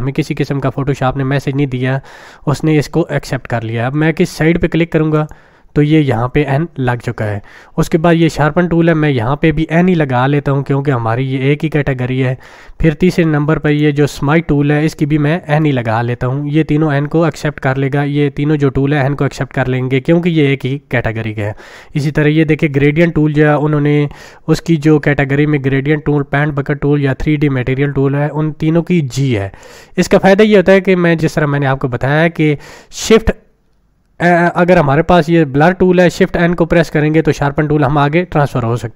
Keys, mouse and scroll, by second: 5.1 click, 8.1 click, 8.1 click, 12.0 click, 13.6 click, 15.6 n.